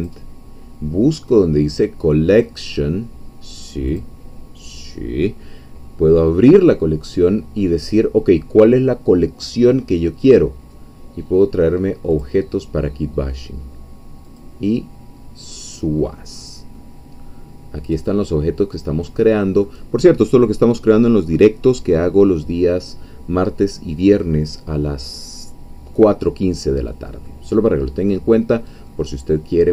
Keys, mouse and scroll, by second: 0.0 click, 4.0 click, 12.1 click, 14.2 click, 16.0-16.8 scroll down 2, 16.8-19.8 middle drag, 21.9-24.4 scroll up 1, 24.4-26.8 scroll up 1, 26.8-27.3 scroll down 1, 27.3 middle click, 28.1-28.6 scroll up 1, 28.6 scroll down 1, 28.9-29.7 middle drag.